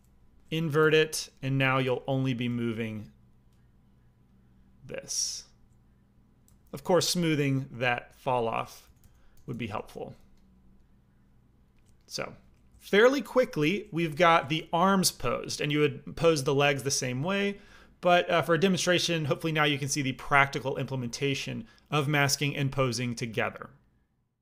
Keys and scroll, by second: 0.7 ctrl+i, 1.7 f, 2.4 f, 6.4 ctrl+z, 7.3 a, 8.8-10.1 typing, 13.6 alt+m.